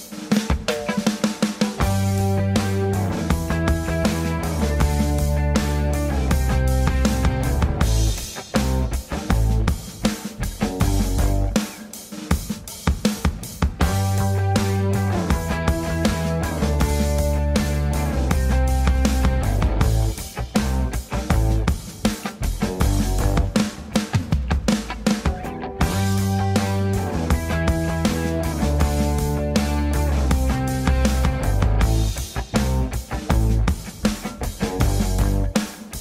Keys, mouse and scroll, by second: 0.0 click, 0.2 g, 0.6 shift+click, 1.1 b, 2.0 g, 2.4 shift+click, 2.7 shift+click, 3.0 shift+click, 3.2 shift+click, 3.8 g, 4.4 scroll up 1, 4.5-5.0 scroll down 1, 5.0 g, 6.2 z, 6.6 scroll down 3, 6.8 click, 11.7 ctrl+space, 12.2 ctrl+space, 14.1 click, 15.5 middle click, 15.8-16.2 scroll up 4, 16.2 click, 16.3 g, 16.8 ctrl+c, 17.0 ctrl+c, 18.1 click, 19.0 ctrl+v, 19.2 alt+middle click, 19.6 g, 19.8 shift+middle click, 19.8 scroll up 2, 20.2 click, 20.3 scroll down 2, 20.6 shift+middle click, 20.9 click, 21.5 click, 22.3 click, 24.5 click, 25.1 ctrl+s, 25.3 click, 26.5 click, 26.9 click, 27.3 click, 27.5 click, 27.8 click, 28.5 click, 29.3-30.2 scroll up 2, 29.6 b, 30.3-30.7 scroll down 3, 30.7 shift+click, 31.0 shift+click, 31.5 ctrl+j, 32.0-32.3 scroll up 5, 32.4 shift+middle click, 32.9 ctrl+j, 33.6 click, 35.3 b.